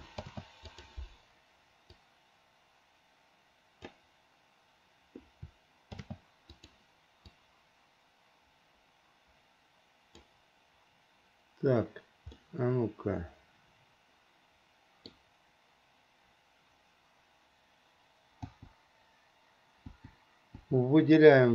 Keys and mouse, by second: 0.4 shift+d, 2.2-4.0 drag, 6.1 shift+d, 7.4-10.4 drag, 12.5-15.2 middle drag, 18.7 click, 20.1 click, 20.8 click.